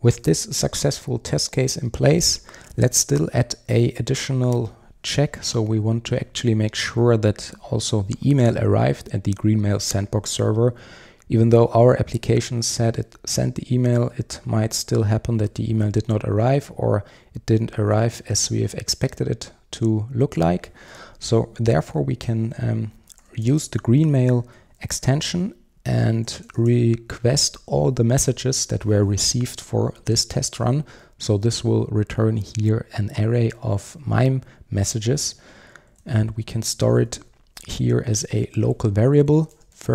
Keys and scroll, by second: 24.5 Return, 35.3 Return.